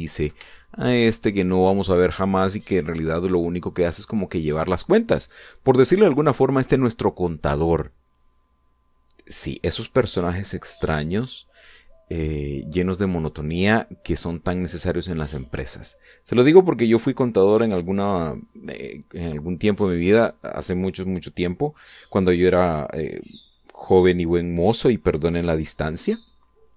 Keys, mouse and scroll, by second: 1.1 shift+middle click, 2.9 scroll down 2, 3.2-4.5 middle drag.